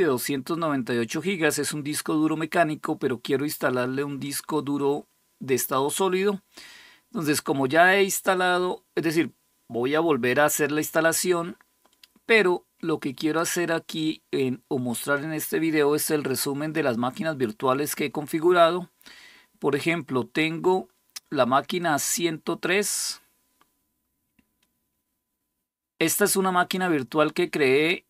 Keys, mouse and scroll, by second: 13.1 click, 21.6 click.